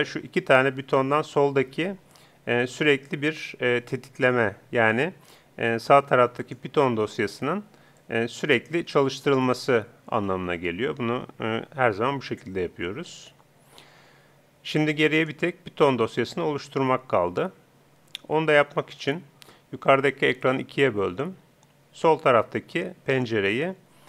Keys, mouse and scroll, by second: 6.4-9.6 drag, 15.2-16.9 drag, 20.4-22.1 drag, 23.2-24.0 drag.